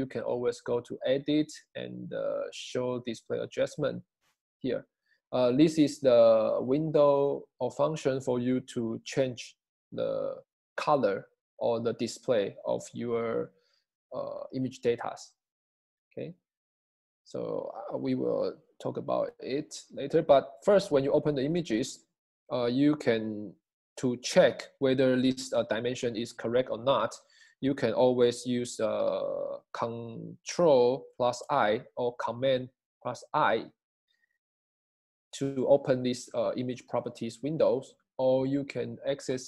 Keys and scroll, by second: 31.5 super+i.